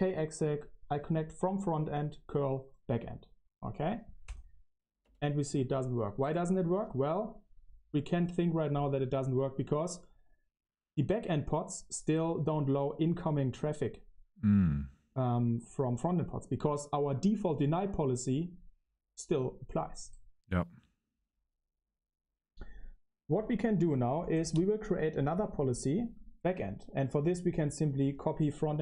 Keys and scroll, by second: 5.0 Return, 27.4-28.8 typing.